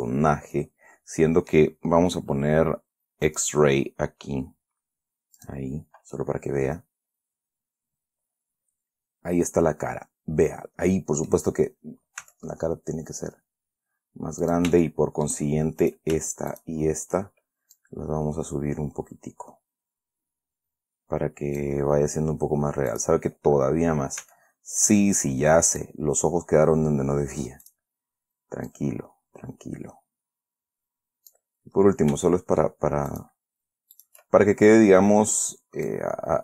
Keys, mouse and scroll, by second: 0.9-2.1 drag, 3.6 click, 3.9-4.6 scroll down 2, 4.6-5.4 scroll down 1, 5.7 click, 6.5-11.8 middle drag, 12.6 s, 14.8 shift+click, 15.2 shift+middle click, 16.2 shift+right click, 16.9 shift+right click, 18.1-22.1 drag, 23.3 click, 24.5 s, 26.0 click, 28.0 click, 29.0-31.8 drag, 32.1-32.6 scroll up 2, 32.6 shift+middle click, 33.4 shift+right click, 34.3 shift+right click, 34.7-35.2 shift+scroll down 3, 36.2-36.4 right drag.